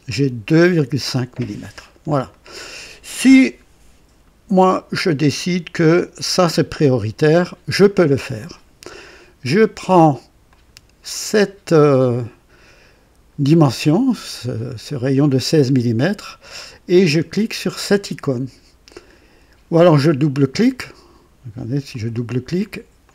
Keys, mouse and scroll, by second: 0.0 click, 1.2 scroll up 1, 1.8 scroll down 1, 2.3-3.0 right drag, 4.1-4.5 scroll up 1, 4.9-7.2 scroll down 1, 10.4 click, 21.8 click, 23.0 click.